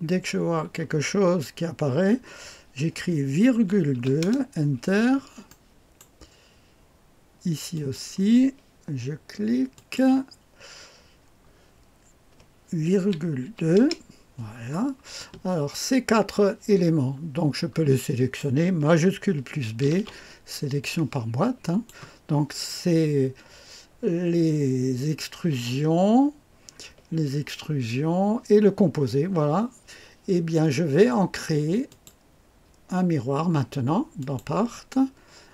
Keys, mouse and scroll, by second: 3.9 KP_2, 4.2 Return, 5.4-6.6 drag, 7.7 click, 9.7 click, 13.1 ,, 13.4 KP_2, 13.7 Return, 14.6-16.8 scroll down 1, 16.8-17.4 scroll down 1, 17.4-17.9 scroll down 1, 17.9 click, 19.8 shift+b, 20.7-22.3 drag, 31.8 click, 34.1 click.